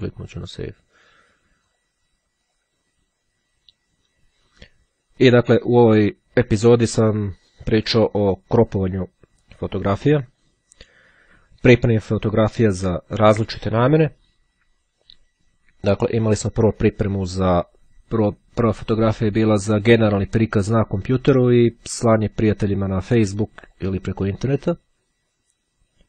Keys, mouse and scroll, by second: 0.5 click, 1.7 click, 2.6 click, 18.9-20.1 drag, 22.4-24.4 drag.